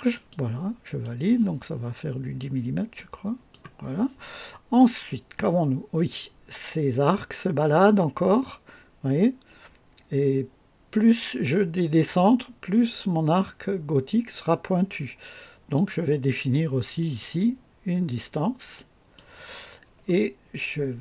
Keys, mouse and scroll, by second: 0.1 click, 1.0 click, 2.4-3.7 drag, 7.8-15.9 drag, 17.0 click, 18.7 click.